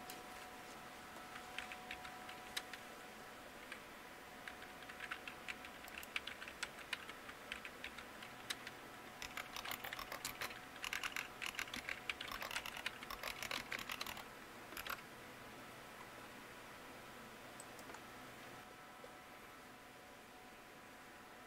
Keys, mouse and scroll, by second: 8.2 click, 8.9-15.2 typing.